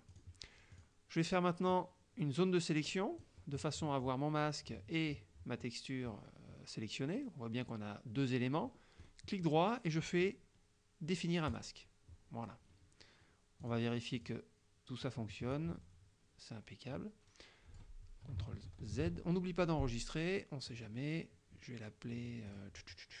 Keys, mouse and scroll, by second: 0.1 click, 0.8 click, 1.8-3.5 drag, 9.1 right click, 11.5 click, 13.8 click, 14.2 click, 15.1-18.1 drag, 19.1 ctrl+shift+z, 20.7 click, 22.5 click.